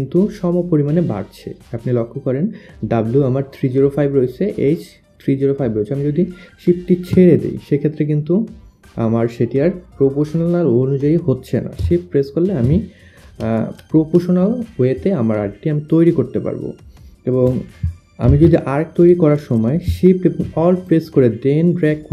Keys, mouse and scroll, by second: 13.0 ctrl+click, 17.0 click, 18.3 click, 20.5 alt+shift+click.